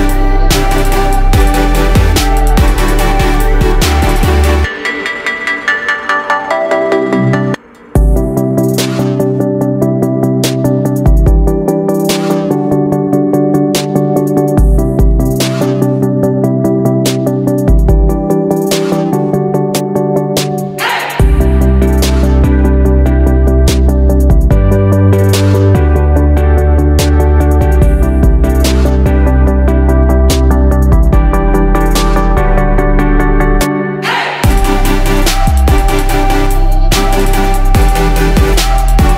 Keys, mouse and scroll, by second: 14.0 ctrl+g, 15.0 click, 17.4 Down, 17.6 Down, 20.2-26.9 drag, 27.6 ctrl+g, 30.3 click, 33.9 shift+click, 35.3 click, 36.8 ctrl+g, 38.1-39.1 drag.